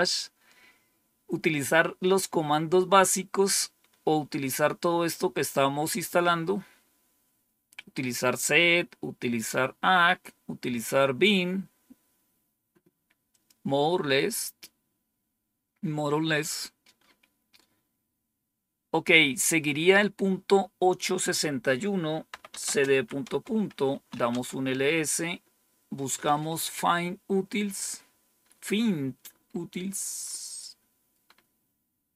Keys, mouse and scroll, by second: 13.2 click, 21.0 click, 22.0-24.4 typing, 30.2 scroll up 1.